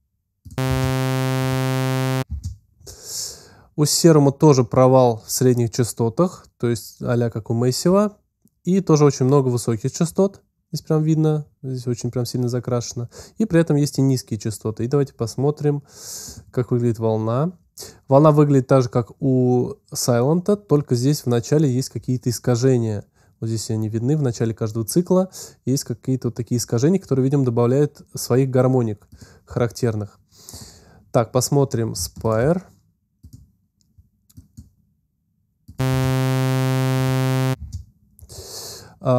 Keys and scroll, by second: 0.5 space, 2.1 space, 35.7 space, 37.4 space.